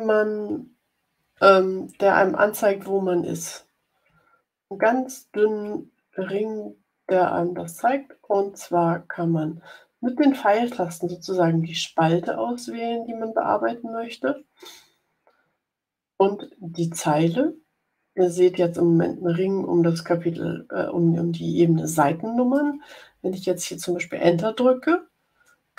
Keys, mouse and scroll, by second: 3.4 Up, 3.9 Up, 4.5 Up, 5.6 Up, 7.0 Right, 7.7 Left, 8.2 Left, 9.0 Left, 10.4 Right, 11.0 Right, 11.5 Left, 12.4 Left, 14.1 Down, 14.6 Down, 15.7 Down, 16.3 Down, 17.2 Up, 25.2 Return.